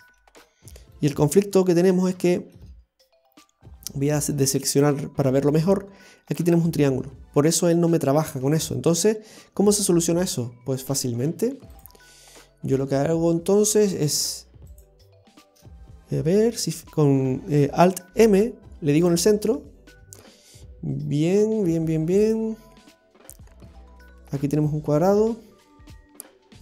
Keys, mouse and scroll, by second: 0.5-1.0 scroll down 2, 1.0 shift+middle click, 1.6-2.0 scroll up 4, 2.3 shift+middle click, 4.7 click, 9.2-10.4 scroll up 2, 11.9 click, 14.2 right click, 14.7 shift+right click, 16.5 alt+m.